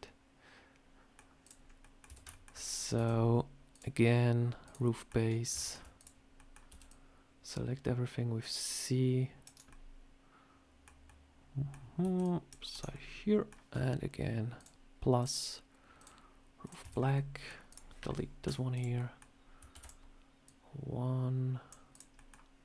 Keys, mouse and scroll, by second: 1.3 click, 1.5 scroll up 1, 1.7 middle click, 1.9 Tab, 1.9-2.4 scroll down 2, 2.1 shift+middle click, 2.5 scroll up 2, 2.8 a, 3.6 click, 4.8 middle click, 5.4 shift+middle click, 5.8 click, 6.1 scroll up 1, 6.2 middle click, 6.5 c, 9.5 middle click, 10.9 middle click, 11.9 c, 12.8 middle click, 14.4 click, 15.0 click, 16.5 click, 16.7 Tab, 16.8 scroll down 3, 17.0 middle click, 17.5 click, 18.3 Delete, 18.6 click, 18.8 middle click, 19.6 shift+d, 20.3 click, 21.8 click, 22.0 middle click.